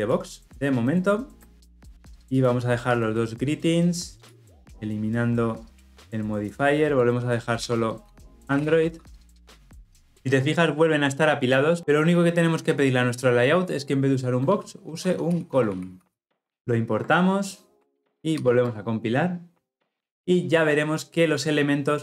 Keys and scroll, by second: 9.9 Delete, 11.8 Escape, 16.5 alt+Return.